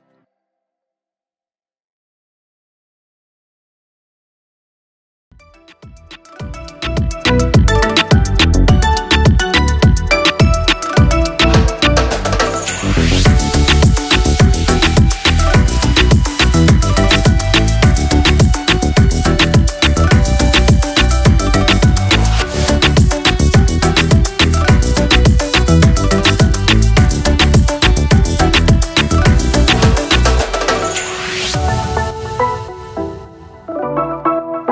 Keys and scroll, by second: 3.1 ctrl+-, 4.1 -, 12.9 ctrl+-, 16.9 ctrl+0.